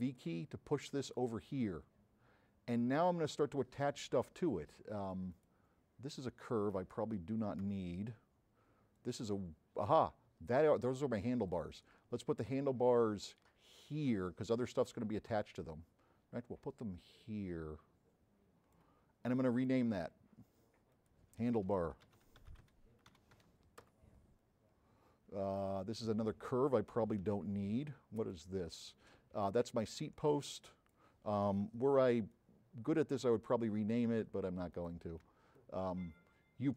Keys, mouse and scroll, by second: 1.6 middle click, 1.9 middle click, 3.1-4.2 drag, 5.4 click, 9.1 click, 11.6-14.8 drag, 11.6 v, 15.2-18.8 drag, 19.5 click, 21.0 click, 22.1-22.8 typing, 25.6 click, 28.3 click, 30.5 click, 30.5 b, 31.7 m, 35.6 m.